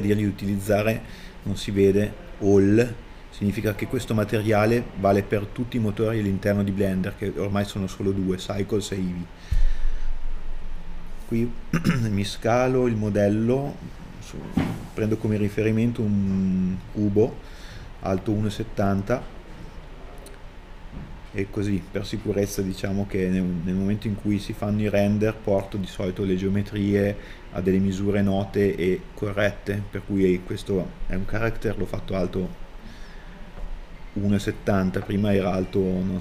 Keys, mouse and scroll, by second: 0.9 KP_1, 2.1 middle click, 3.6 shift+a, 12.5 right click, 13.2 middle click, 13.8 middle click, 14.7 middle click, 18.8 KP_1.